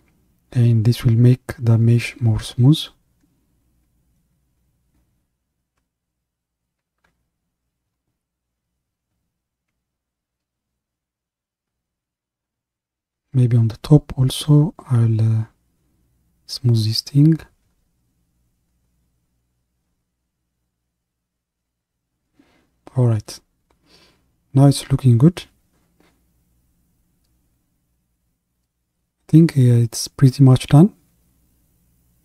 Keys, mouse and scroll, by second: 3.8-5.4 middle drag, 5.4-7.0 scroll down 5, 7.0 KP_1, 8.4-10.2 scroll up 5, 10.2-13.2 middle drag, 14.6-19.3 drag, 20.6-23.0 drag, 23.0-24.8 middle drag, 24.8 scroll down 2, 25.5 middle click, 26.3-27.1 scroll up 1, 27.1-30.0 middle drag, 31.3 middle click.